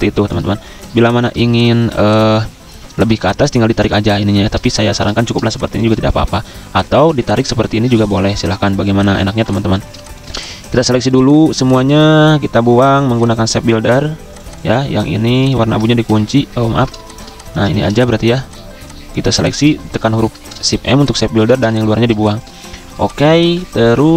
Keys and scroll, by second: 1.4 typing, 4.3 ctrl+z, 9.4 v, 11.9 v, 15.9 ctrl+1, 16.6 ctrl+2, 17.7 ctrl+z, 20.1 m, 21.6 v, 23.6 z.